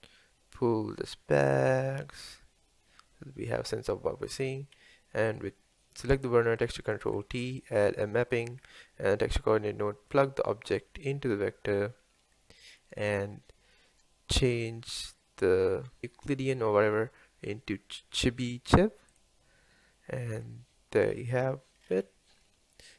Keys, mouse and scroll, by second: 1.1-5.5 drag, 7.1 ctrl+t, 7.6-9.2 middle drag, 9.2 scroll up 2, 11.2 click, 13.2 middle click, 13.3 scroll up 1, 21.3-22.9 scroll up 2.